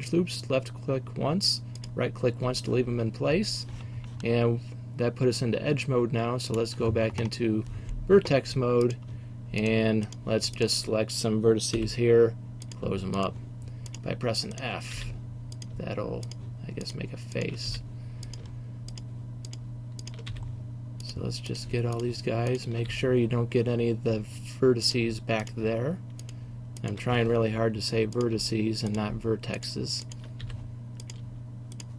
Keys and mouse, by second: 2.0-7.3 middle drag, 7.3 click, 7.6-10.2 middle drag, 10.2-11.8 right drag, 11.8 f, 15.0 f, 17.8 f, 20.4 f, 22.9 f, 26.4 middle click, 27.2 f, 30.6 f.